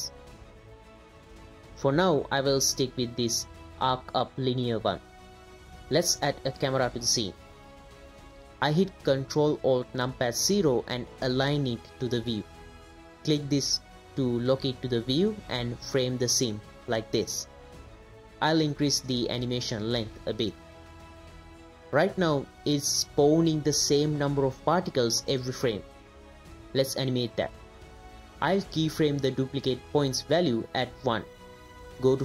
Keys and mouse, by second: 0.5 space, 1.4 space, 1.5-1.9 drag, 2.3 space, 6.7 shift+a, 10.7 ctrl+alt+KP_0, 13.7 click, 14.9-15.5 ctrl+middle drag, 15.7 middle click, 16.5 middle click, 16.7 ctrl+middle click, 17.4 ctrl+click, 18.0 click, 18.1 space, 19.0-20.5 drag, 21.0 space, 23.0 space, 23.7 click, 25.0 click, 26.1 click, 26.6 click, 28.3 click, 28.7 click, 30.6 click.